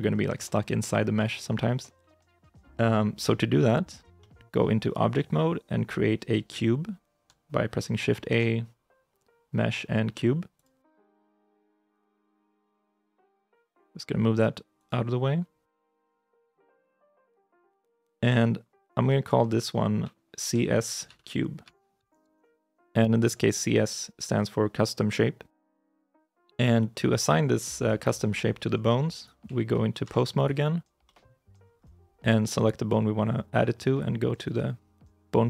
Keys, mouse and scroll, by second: 3.0 ctrl+Tab, 3.8 scroll down 1, 4.0 middle click, 4.5-6.1 scroll up 1, 8.1 shift+a, 12.7 g, 14.6 x, 15.9 alt+g, 16.5 x, 17.7 shift+middle click, 18.2 scroll up 1, 18.2 middle click, 18.7 shift+middle click, 19.8 F2, 20.7-22.3 typing, 25.5 Return, 26.2 shift+middle click, 26.7 scroll up 1, 29.0 right click, 29.9 ctrl+Tab, 30.2 right click, 30.9 middle click, 31.6-33.6 scroll up 1.